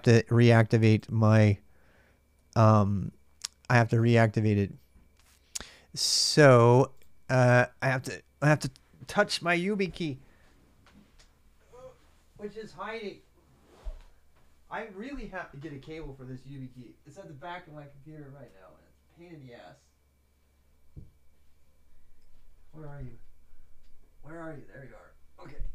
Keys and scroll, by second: 0.0-25.7 typing.